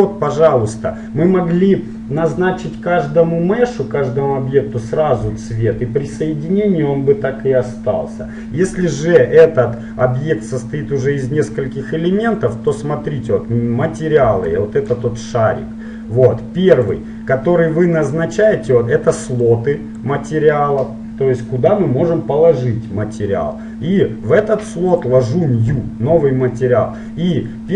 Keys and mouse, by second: 0.4-2.4 right drag, 12.9-16.6 drag, 17.0-18.8 drag, 19.6-21.6 drag, 25.1-27.1 drag.